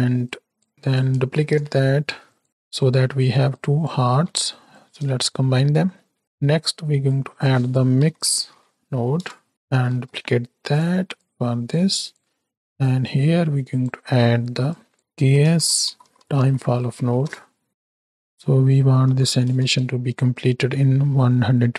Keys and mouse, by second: 0.2 click, 1.3 ctrl+shift+d, 2.4 click, 3.4 click, 5.5 middle click, 7.0-9.5 drag, 9.9 shift+d, 11.1 click, 11.8 click, 12.8-13.9 drag, 14.6-17.7 drag, 17.9-19.6 drag.